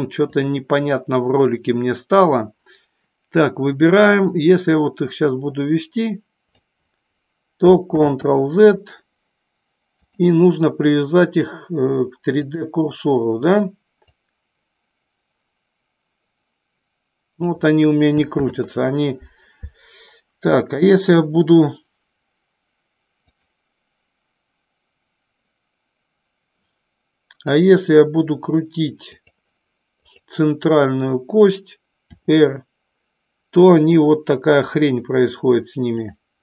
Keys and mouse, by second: 0.3 click, 4.1-6.5 drag, 8.1 ctrl+z, 9.9-12.5 drag, 14.0-17.5 drag, 18.6 ctrl+z, 20.8 click, 23.3 click, 27.3-29.3 drag, 32.0 r, 35.9 click.